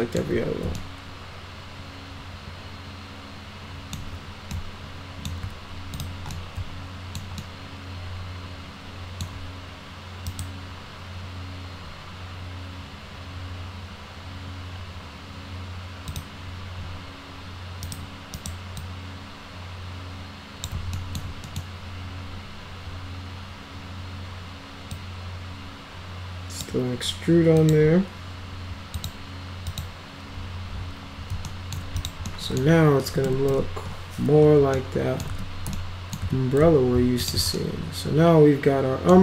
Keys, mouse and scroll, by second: 0.8-4.0 alt+middle drag, 4.5 alt+middle click, 5.9 ctrl+click, 6.4 alt+middle click, 7.4-9.2 alt+middle drag, 10.3 right click, 16.1 click, 17.8 right click, 18.4 right click, 18.8-20.6 drag, 21.0 alt+middle click, 21.4 middle click, 25.0-26.6 drag, 27.6 click, 28.9 click, 29.7 click, 31.5 alt+middle click, 32.0 click, 32.3 middle click, 33.1 F3, 33.3 F3, 33.5 F4, 34.8 alt+middle click, 35.3 z, 35.7 alt+middle click, 36.2 z, 37.2 click, 37.6-39.1 alt+middle drag.